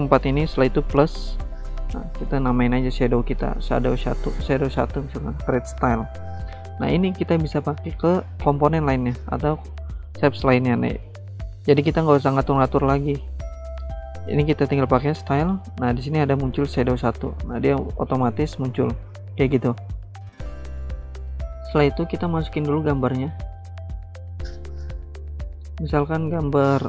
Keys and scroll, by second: 2.0-3.4 typing, 21.5 alt+Tab.